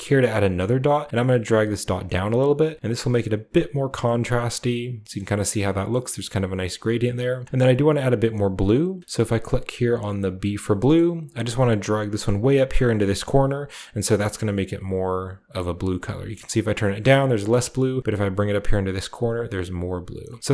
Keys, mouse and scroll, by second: 0.1 click, 0.9 click, 1.2 click, 1.6 click, 2.1 click, 3.0 click, 3.5 click, 4.1-5.2 middle drag, 7.1 click, 7.8 click, 9.1 click, 10.3 click, 11.0-12.1 scroll up 1, 11.8 click, 12.3 click, 13.5 click, 14.0 click, 14.4 click, 14.8 click, 15.5 click, 15.8 click, 16.5 click, 17.3 click, 18.8 click, 19.4 click, 20.4-20.5 scroll down 1.